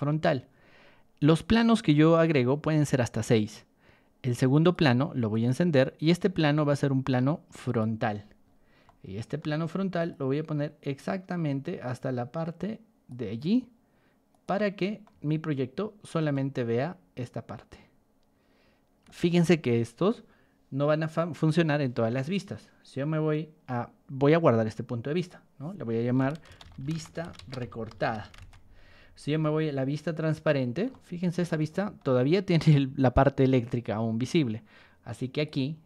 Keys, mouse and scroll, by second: 1.3 click, 4.5 click, 5.3 click, 6.1 click, 7.6 click, 8.1-8.6 scroll down 2, 8.8-9.3 shift+middle drag, 10.0-13.0 drag, 14.3 click, 15.0-16.1 shift+middle drag, 16.3-19.0 middle drag, 25.1 click, 26.2-28.4 typing, 30.1 click, 30.9-31.4 shift+middle drag, 31.5 shift+middle click, 32.1 shift+middle click, 35.3 shift+click.